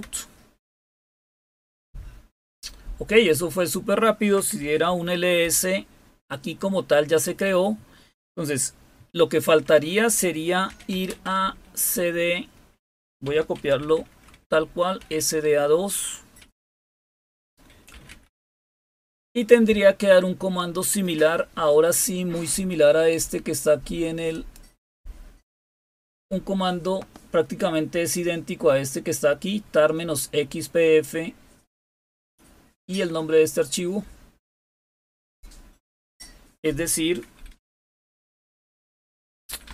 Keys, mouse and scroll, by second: 4.5-5.5 typing, 5.3 Return, 10.4-11.3 typing, 13.2-13.8 typing, 14.9-18.2 typing, 24.2 click, 35.2 click, 37.5 Up, 37.7 Up, 38.6 Up, 39.2 Down, 39.4 Down, 39.6 Down.